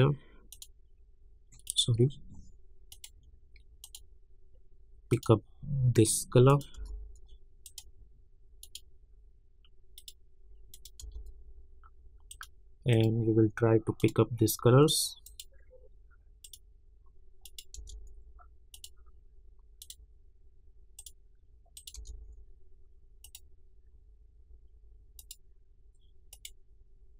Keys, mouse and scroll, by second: 6.7 Return, 7.6 click, 11.0 Return, 12.3 click, 17.7 Return, 18.7 click, 21.9 Return, 23.2 click.